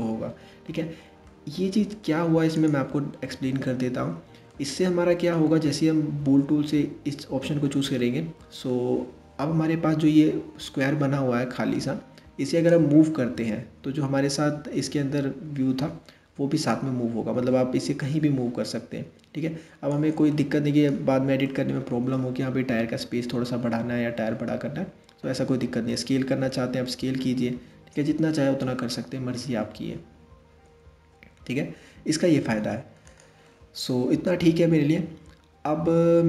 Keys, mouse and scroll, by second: 2.2 click, 3.6 scroll up 1, 4.1-7.2 middle drag, 7.6-10.6 middle drag, 12.3 click, 19.9 scroll up 1, 19.9-20.5 middle drag, 20.5 scroll down 2, 21.0-24.2 middle drag, 25.5 s, 33.0-36.1 middle drag.